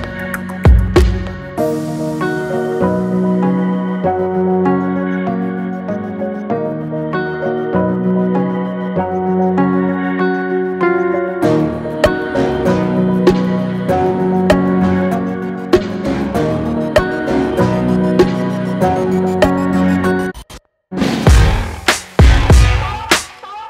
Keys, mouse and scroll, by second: 6.0 click, 7.6 Down, 8.2 click, 9.8 Up, 12.0 ctrl+shift+], 13.0 right click, 14.3-19.8 drag, 19.8 Right, 20.3 click, 21.9-23.6 drag.